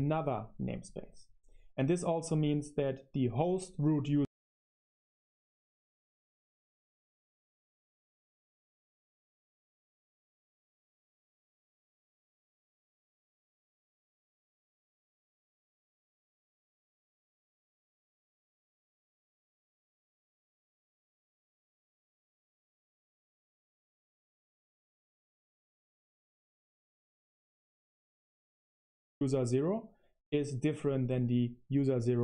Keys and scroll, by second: 4.0-14.6 typing, 4.3 super+7, 14.6 super+1, 18.6 super+7, 19.6-29.3 typing, 28.0 Return.